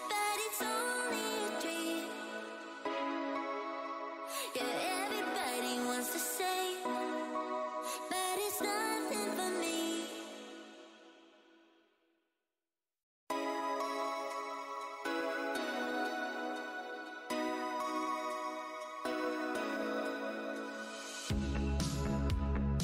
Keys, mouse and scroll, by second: 0.0 shift+right click, 0.4 right click, 1.9 scroll up 1, 2.2 w, 3.4 Tab, 3.5 w, 4.4 shift+Tab, 5.1 alt+click, 5.5 Tab, 5.6 w, 5.6-5.9 scroll down 1, 6.3 scroll down 1, 6.3 r, 6.9 Tab, 7.0 alt+click, 7.4 alt+Tab, 7.7 space, 7.7 w, 8.3-8.7 scroll down 1, 8.3 space, 8.7-9.6 scroll up 2, 9.6-11.9 typing, 9.9-10.4 alt+scroll up 2, 12.7 Tab, 12.9-13.5 scroll down 1, 13.7 shift+Tab, 14.4 scroll down 1, 14.4 w, 14.9 Tab, 15.1 click, 16.8 Delete, 17.4 Tab, 19.9 F8, 20.5 Tab, 20.9 click, 21.3-22.0 scroll down 1, 22.3 click.